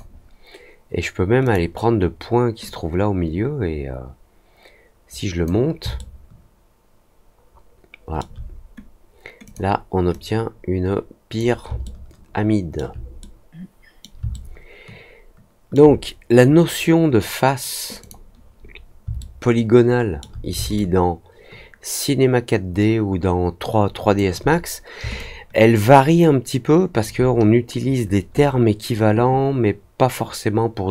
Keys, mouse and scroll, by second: 1.4 click, 2.6-5.4 drag, 5.9-8.1 alt+middle drag, 9.4 click, 10.0-11.3 drag, 11.8 alt+middle click, 13.1 middle click, 14.2-15.7 alt+middle drag, 17.9 click, 19.1-20.1 alt+middle drag, 20.7-24.1 alt+drag, 25.1-27.0 alt+drag.